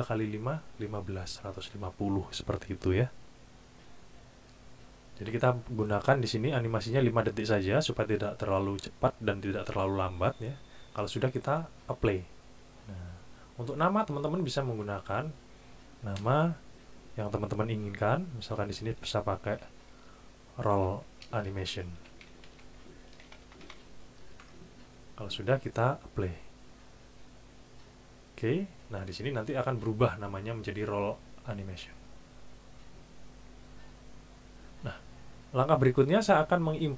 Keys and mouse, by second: 14.5 click, 19.3 shift+r, 20.7-24.1 typing, 26.4 click, 28.3 click, 33.2-34.7 drag.